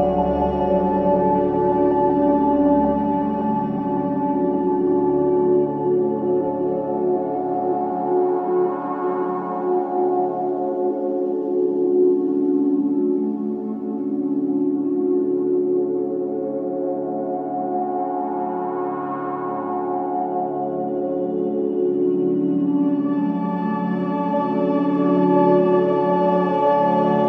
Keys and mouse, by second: 0.0 click, 1.3 click, 2.0 space, 2.5 space, 3.2 click, 4.0-4.8 drag, 5.1 click, 5.5 space, 7.2 space, 9.3-10.3 alt+drag, 11.2 alt+click, 11.9-12.6 alt+drag, 12.7-13.4 drag, 13.6 alt+click, 14.4-15.0 alt+shift+drag, 15.2-19.7 alt+drag, 19.8 ctrl+s, 20.9 F3, 21.7-22.4 typing, 23.5-26.2 drag, 26.4 ctrl+alt+click, 26.8 alt+click.